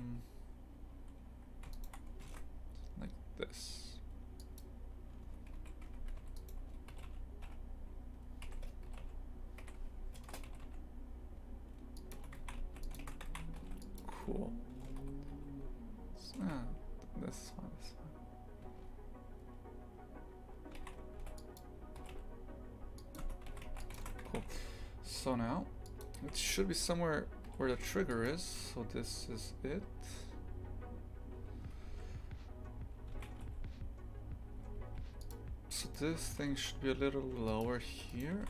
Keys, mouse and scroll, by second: 1.7 alt+shift+right click, 2.3 ctrl+b, 5.2 Tab, 6.2 3, 6.4 right click, 7.0 g, 8.9 g, 10.5 g, 12.2 Tab, 12.4 shift+f, 14.2 Tab, 15.0 ctrl+z, 15.3 ctrl+z, 16.5 Tab, 18.6 Tab, 20.8 shift+f, 22.0 g, 23.2 Tab, 23.5 shift+f, 26.2 shift+f, 27.5 g, 33.2 shift+f, 35.8 right click, 36.4 g, 38.1 right click.